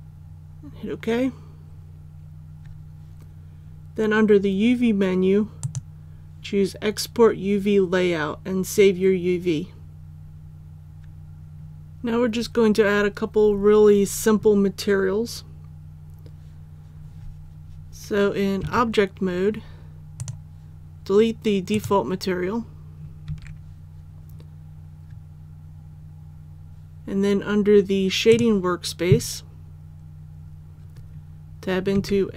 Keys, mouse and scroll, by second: 18.6 Tab, 20.2 click, 23.3 Tab, 28.3 click, 29.5-31.9 scroll down 1, 31.9 Tab.